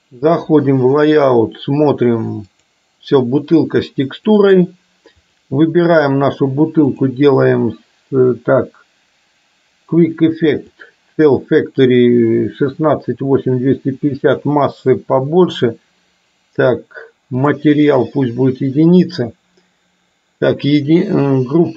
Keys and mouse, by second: 5.2 click, 7.0-21.7 drag.